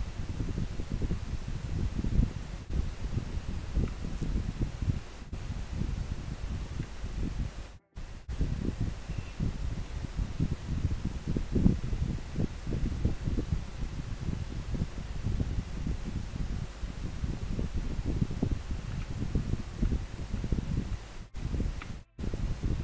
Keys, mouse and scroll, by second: 7.3-9.4 scroll down 1, 10.8-12.5 scroll down 1, 15.0-16.5 scroll up 1.